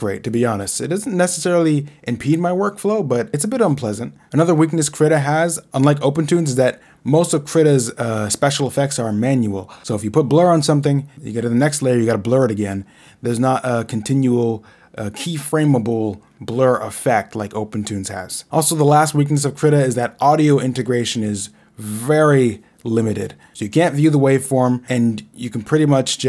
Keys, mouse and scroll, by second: 0.1 right click, 0.6 right click, 1.2 click, 1.7 right click, 2.1 right click, 2.1 click, 3.0 right click, 4.2 right click, 5.2 click, 5.7 right click, 6.9 click, 9.2 ctrl+e, 12.7 ctrl+e, 13.3 ctrl+Left, 13.3 ctrl+z, 13.3 e, 14.8 Left, 15.2 Right, 15.6 Right, 16.3 Left, 17.1 Right, 18.4 Left, 19.2 Right, 20.6 Left, 21.1 Left, 21.3 Right, 21.7 right click, 22.5 click, 23.7 Right, 25.6 click, 25.7 right click.